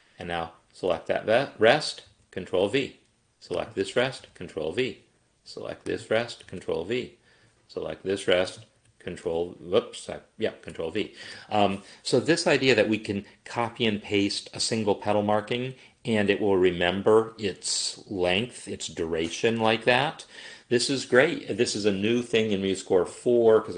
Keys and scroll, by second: 2.1 ctrl+v, 4.2 ctrl+v, 6.5 ctrl+v, 9.6 ctrl+v.